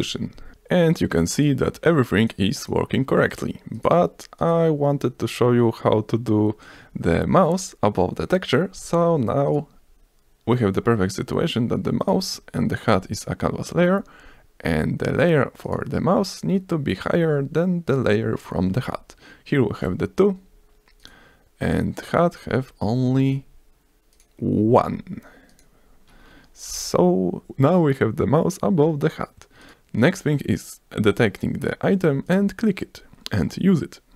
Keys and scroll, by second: 18.8 ctrl+s, 19.8 s, 26.7 F5.